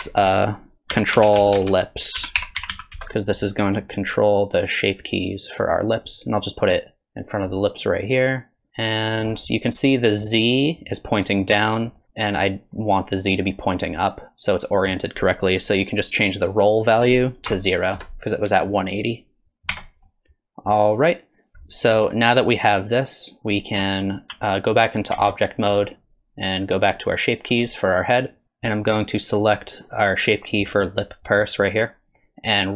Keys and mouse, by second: 0.0 F2, 4.3-6.0 drag, 6.8 click, 8.2 click, 14.8-18.4 drag, 19.7 Tab, 20.1-20.7 middle drag, 25.1 ctrl+Tab, 25.6 click, 26.9 click.